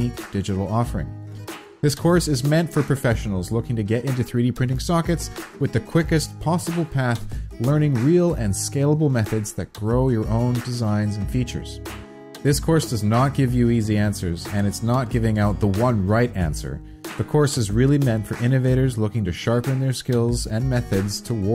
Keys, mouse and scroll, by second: 5.4 click, 5.4 4.